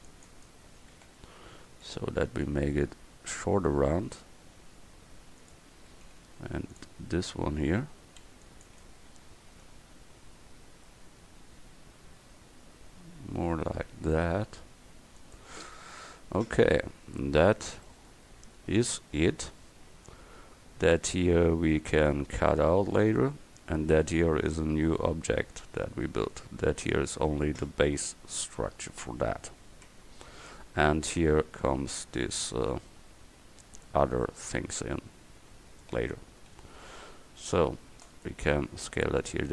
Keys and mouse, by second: 1.0 KP_1, 2.6 g, 6.2 a, 6.5 v, 8.3 c, 9.7 g, 17.9-21.5 drag, 29.9 Tab, 36.1 Tab, 36.6 a, 37.0 c, 38.5 s.